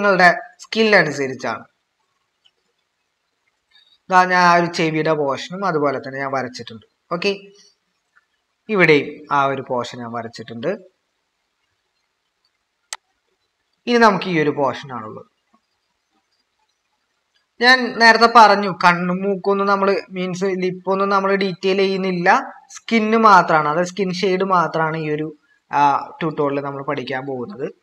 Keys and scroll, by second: 27.6-27.8 typing.